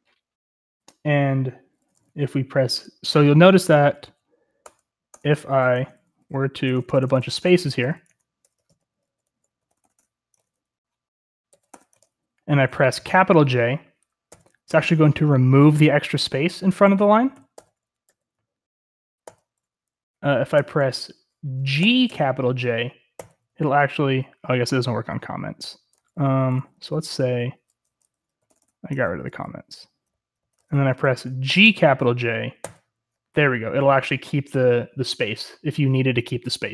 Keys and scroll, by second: 4.0 i, 4.6 Return, 5.1 Return, 5.8 Escape, 6.0-9.9 typing, 8.1 Escape, 10.4 Escape, 11.3-12.0 typing, 14.3 typing, 16.7-18.1 typing, 19.2 typing, 20.6-23.2 typing, 25.9-31.5 typing, 32.6 typing.